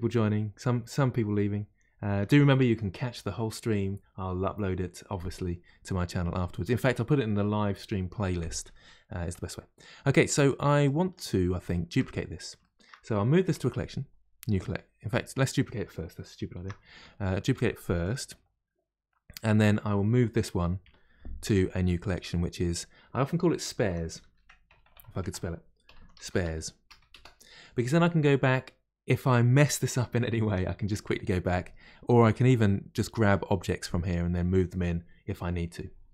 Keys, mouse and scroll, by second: 5.6-9.5 middle drag, 9.5-9.9 scroll down 2, 10.2-10.8 middle drag, 10.8 click, 11.6-13.4 shift+middle drag, 13.4 m, 16.6 shift+d, 20.8 m, 24.8 BackSpace, 24.9 BackSpace, 27.1 Return.